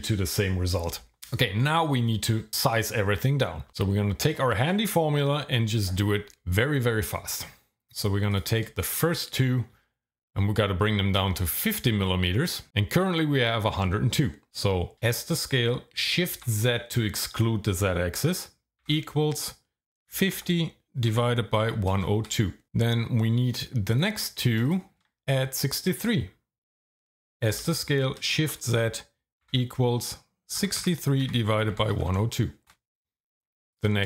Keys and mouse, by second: 8.9 alt+shift+click, 14.9 s, 16.3 shift+z, 18.8 =, 20.1 KP_5, 20.3 KP_0, 21.6 KP_1, 21.9 KP_0, 22.2 KP_2, 22.6 KP_Enter, 23.9 alt+click, 24.6 alt+shift+click, 27.5 s, 28.4 shift+z, 29.4 =, 30.6-32.1 typing, 32.7 KP_Enter.